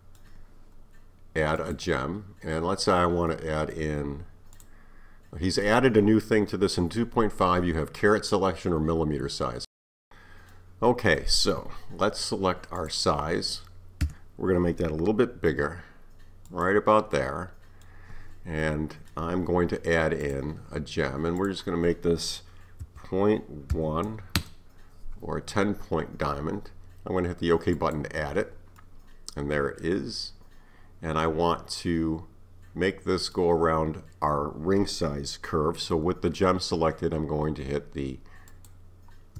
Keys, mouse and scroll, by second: 1.6-3.7 drag, 4.6-7.6 drag, 10.1-12.8 middle drag, 12.8 click, 14.0 KP_1, 15.5 s, 17.2-20.2 middle drag, 20.2-23.3 drag, 28.8-31.8 middle drag, 38.5 shift+click.